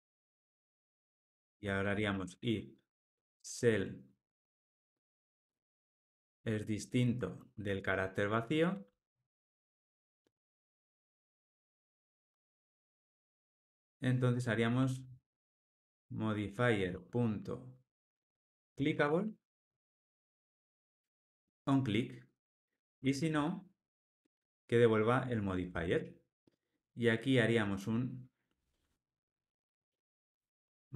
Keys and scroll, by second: 11.5 alt+super+l, 19.7 Return, 20.9 Tab, 25.2 Tab, 25.9 alt+super+l.